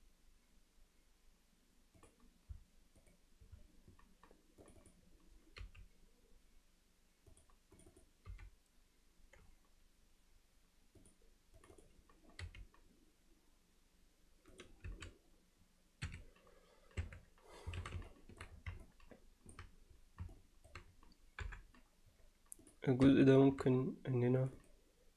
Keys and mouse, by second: 4.7 click, 7.9 click, 8.3 g, 11.8 click, 14.9 s, 17.0 Tab, 17.8 alt+a, 18.1-18.4 alt+middle drag, 18.8-19.6 middle drag, 20.3-20.7 middle drag, 21.4 KP_7, 22.7 click, 23.1 Tab, 24.4 click, 24.6 click.